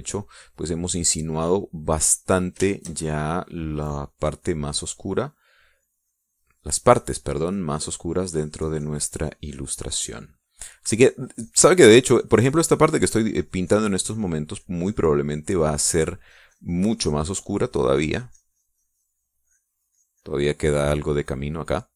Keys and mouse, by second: 0.5-15.1 drag, 15.2-21.1 drag.